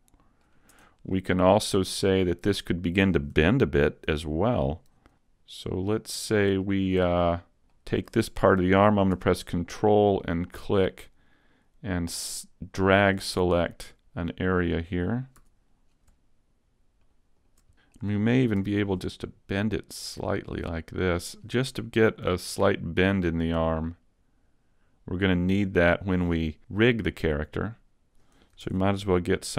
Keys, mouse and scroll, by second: 0.8 Tab, 1.1 middle click, 4.1 z, 5.1 ctrl+Tab, 5.1 middle click, 6.7 shift+middle click, 7.1 middle click, 7.7 shift+middle click, 10.2 ctrl+click, 13.7 scroll up 2, 14.3 middle click, 15.4 z, 15.8-16.9 scroll up 1, 16.9 scroll up 1, 17.1 shift+right click, 17.5 shift+right click, 17.7 middle click, 17.9 scroll down 2, 18.7 r, 21.3 click, 22.3 g, 25.7 click, 27.1-28.1 scroll up 1, 28.7 ctrl+Tab.